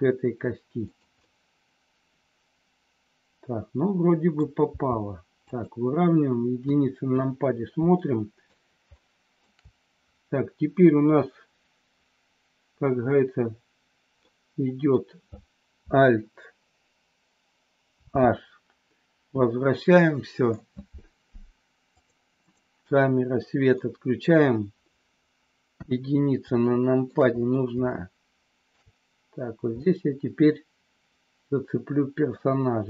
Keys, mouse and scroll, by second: 1.2 middle click, 1.3 scroll up 1, 1.4-4.2 middle drag, 4.7 g, 5.4 click, 6.5 KP_1, 8.0 shift+scroll up 1, 8.1 shift+middle click, 8.8 shift+scroll up 1, 9.0 shift+middle click, 14.2 scroll up 1, 14.4 middle click, 18.0 alt+h, 20.0 middle click, 21.8 click, 23.7 middle click, 25.7 KP_1, 26.6 shift+middle click, 27.8-28.8 shift+middle drag, 29.7-32.4 middle drag.